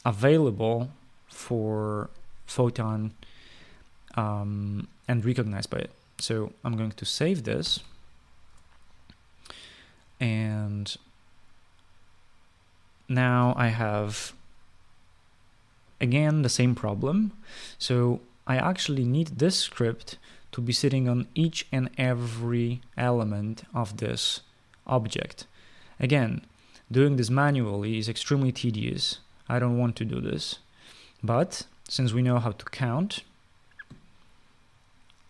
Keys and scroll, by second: 8.4 ctrl+s.